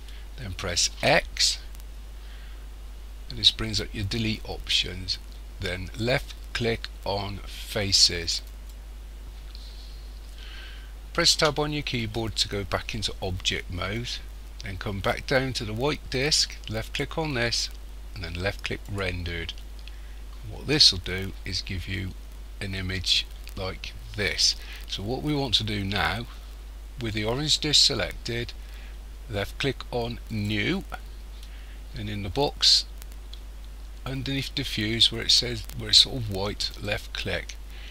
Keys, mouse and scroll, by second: 0.9 x, 11.4 Tab, 16.8 click, 19.0 click, 30.4 click, 36.8 click.